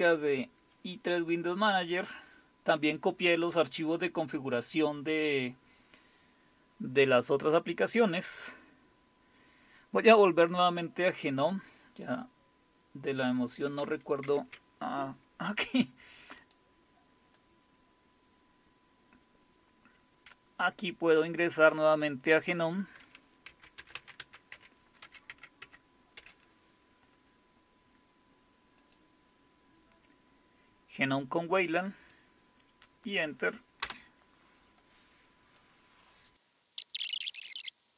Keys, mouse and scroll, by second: 14.3 super+e, 16.4 click, 21.2 click, 22.5 click, 23.5-26.2 typing, 28.8 click, 32.0 click, 33.1 click, 33.9 Return, 36.8 click, 37.3 click, 37.7 click, 37.9 click.